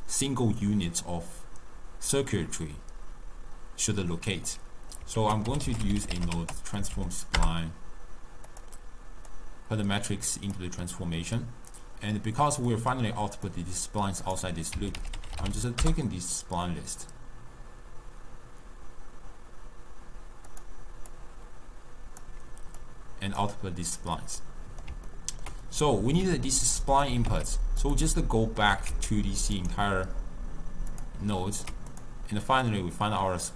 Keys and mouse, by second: 4.6-5.2 middle drag, 5.2 ctrl+a, 9.4 drag, 12.8 click, 14.3-20.5 drag, 21.1-23.0 drag, 24.5-26.6 middle drag, 26.6 drag, 27.1 g, 28.2 middle click, 28.8 g, 29.9 g, 31.5 ctrl+middle click, 32.0 click, 32.7 click.